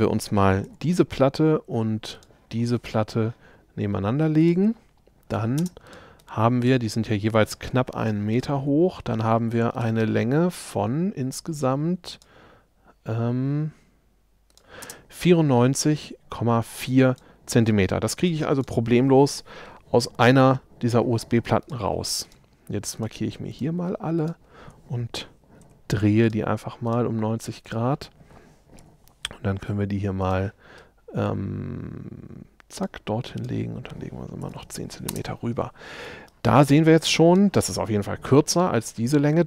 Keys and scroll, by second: 0.7 m, 5.6 shift+space, 6.2 shift+space, 14.9 space, 25.7 shift+q, 28.9 m, 34.5 1, 34.7 Return.